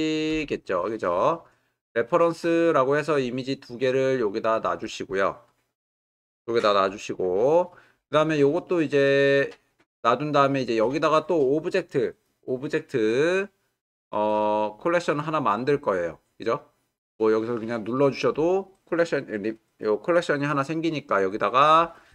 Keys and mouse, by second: 5.9 click, 6.9 click, 17.7 click.